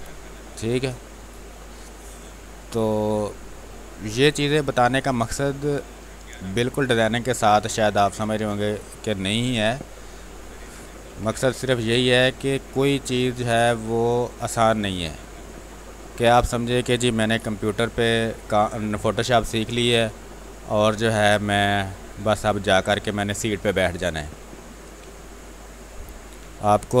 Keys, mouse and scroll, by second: 0.0 space, 0.1 click, 0.4 space, 1.1 click, 2.0 space, 2.1 click, 2.5 space, 3.8-5.2 drag, 5.4-7.3 drag, 7.3 space, 9.1-10.4 drag, 11.1 ctrl+d, 11.3 w, 12.1 click, 13.2 shift+click, 13.6 shift+space, 14.2 ctrl+click, 15.3 click, 15.9 r, 17.5 space, 17.7 ctrl+click, 19.2-23.4 drag, 23.4 space, 23.7 click, 23.9 space, 24.9 r, 25.2-27.0 drag.